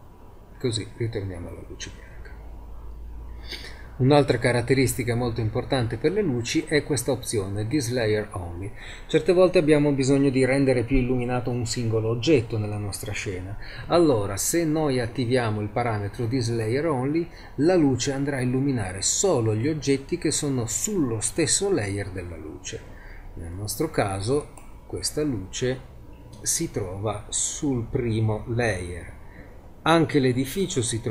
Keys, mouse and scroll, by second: 23.6 z, 24.5-26.2 right drag, 27.1 click.